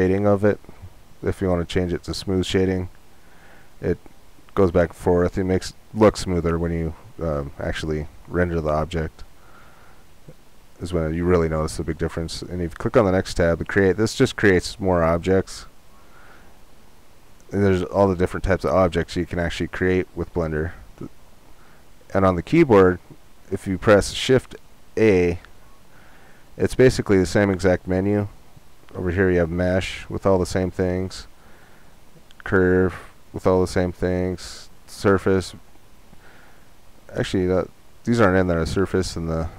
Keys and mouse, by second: 1.7-3.6 drag, 4.3-12.5 drag, 25.6 shift+a.